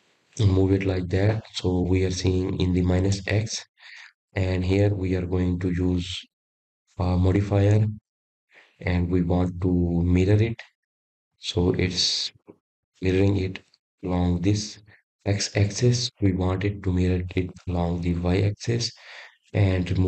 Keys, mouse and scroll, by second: 0.1-1.8 middle drag, 1.8 KP_1, 3.5-6.6 middle drag, 6.9 click, 7.7-9.5 scroll up 4, 11.5 click, 12.1-15.2 drag, 15.4-16.7 scroll down 3.